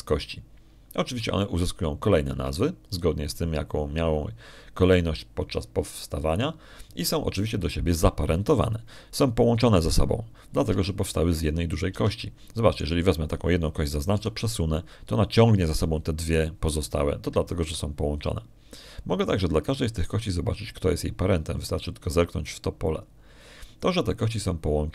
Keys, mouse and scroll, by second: 12.6 Tab, 13.8 Tab, 14.6 right click, 16.0 g, 19.4 Escape, 21.8 right click.